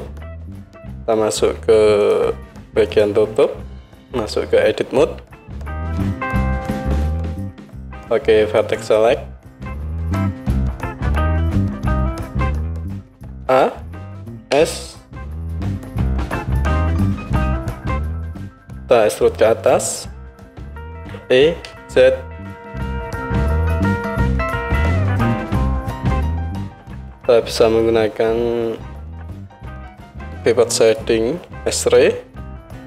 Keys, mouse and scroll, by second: 2.1-2.4 drag, 2.9 click, 5.2 Tab, 8.2 middle click, 8.7-17.5 drag, 13.4 a, 14.5 s, 17.5-24.1 middle drag, 21.0 e, 30.8 click, 31.6-32.8 middle drag.